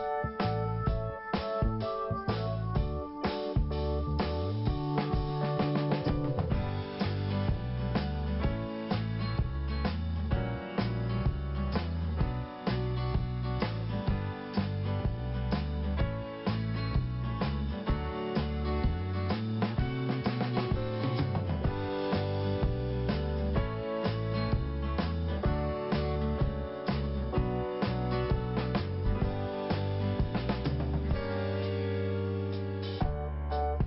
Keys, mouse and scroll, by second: 0.5 click, 2.2 click, 2.8 click, 3.9-4.9 scroll down 1, 4.9 click, 5.0 click, 5.3 click, 6.7 scroll up 1, 7.4 click, 7.9 click, 10.1 click, 10.2 click, 10.6 click, 14.6 click, 14.7 click, 15.1 click, 16.9 click, 17.8 click, 20.2 click, 21.7 click, 22.8 click, 24.7 click, 25.4 click, 26.1 click, 26.9 click, 27.3 click, 27.3 double click, 27.7 double click, 29.6 click, 29.6 click, 30.1 click, 31.1 scroll down 1, 32.2 scroll up 2, 33.1 click, 33.2 click, 33.6 click.